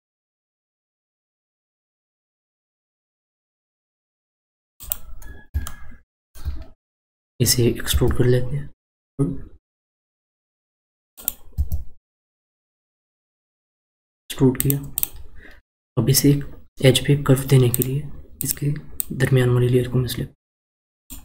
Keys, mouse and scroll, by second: 0.7 s, 5.6 shift+middle click, 6.6-7.4 scroll up 4, 7.9 e, 11.5 e, 14.9 click, 17.7 click, 18.4 click, 18.9 click.